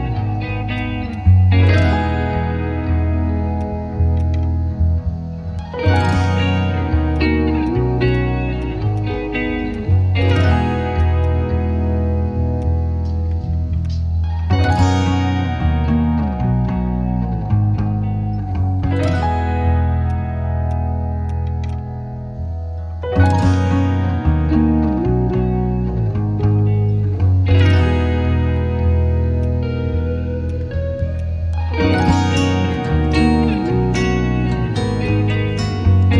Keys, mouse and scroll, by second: 15.0-17.7 typing, 18.0 Return, 28.3 scroll up 1, 30.0-31.0 scroll down 1, 31.2 right click, 34.3-35.0 scroll up 1, 36.0 alt+click.